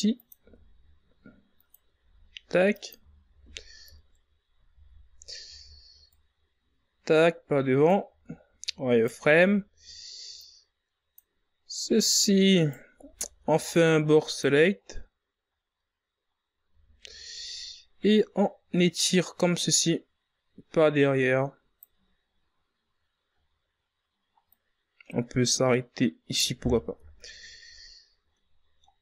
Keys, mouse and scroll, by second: 0.2 z, 1.1 s, 3.2 g, 4.8-8.3 typing, 8.9-10.9 drag, 10.9 z, 11.7 right click, 12.1 b, 14.5 scroll down 1, 14.8 scroll up 4, 15.4 right click, 15.7 b, 17.6-18.3 scroll down 4, 18.4-19.0 scroll up 6, 19.5 z, 20.0 ctrl+scroll up 2, 21.0-24.0 drag, 24.9 scroll down 1, 26.2 scroll up 3, 27.3-29.0 drag.